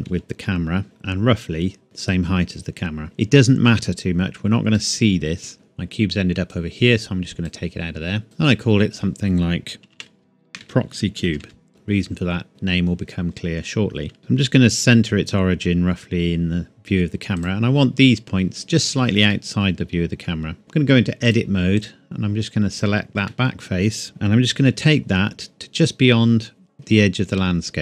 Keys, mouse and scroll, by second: 0.1 g, 0.8 KP_1, 1.8 g, 3.0 middle click, 3.5 scroll down 1, 3.6-4.0 scroll up 1, 4.0-4.4 scroll down 1, 4.8 middle click, 5.5-6.5 scroll up 1, 6.5 click, 10.0 Home, 10.5-11.4 typing, 11.7 KP_Enter, 13.5-14.2 scroll down 2, 14.2 KP_0, 14.6 g, 17.4 click, 19.3 middle click, 20.4 scroll down 1, 20.6 Tab, 21.2 click, 23.3 middle click, 24.6 g.